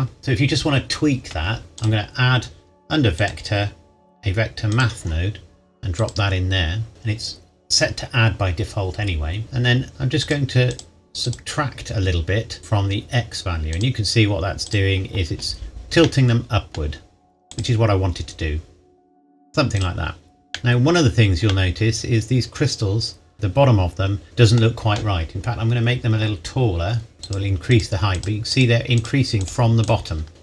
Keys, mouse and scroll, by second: 0.2 click, 1.8 click, 6.9 scroll up 1, 9.4-9.9 scroll up 1, 9.9 click, 13.7 click, 16.0 middle click, 17.5 click, 20.5 middle click, 24.2 middle click, 25.4-27.2 scroll down 1, 27.2 scroll down 1, 27.2 click.